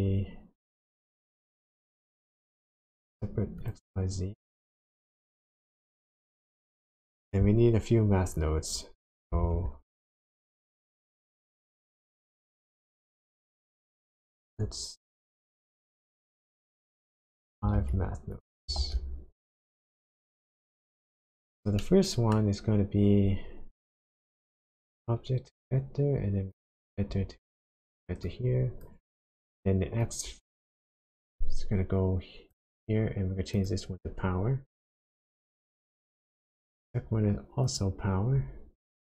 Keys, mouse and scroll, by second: 7.0 click, 8.9 click, 9.4 shift+a, 14.3 shift+d, 15.2 click, 15.4 shift+d, 17.2 shift+click, 17.8 shift+d, 18.4 click, 18.8 shift+d, 19.3 click, 21.2-21.8 scroll up 3, 21.8 middle click, 24.0 click, 26.5 click, 28.3 click, 30.0 click, 33.5 click, 36.0 click, 37.6 click.